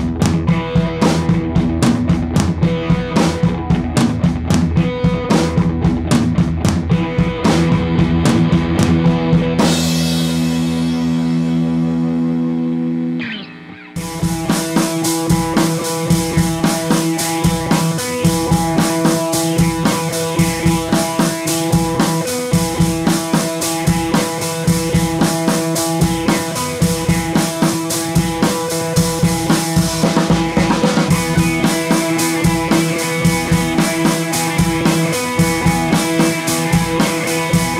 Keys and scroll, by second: 12.3 d, 17.6 Left, 17.7 Left, 17.9 Left, 24.8 super+z.